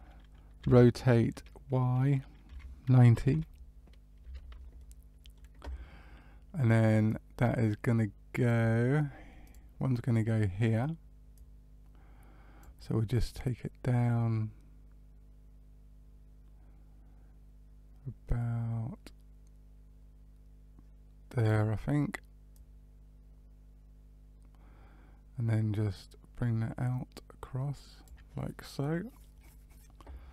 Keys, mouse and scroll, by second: 0.5 r, 4.7 middle click, 7.0 click, 9.4 click, 11.3 click, 13.3 click, 22.5 click, 28.4 middle click.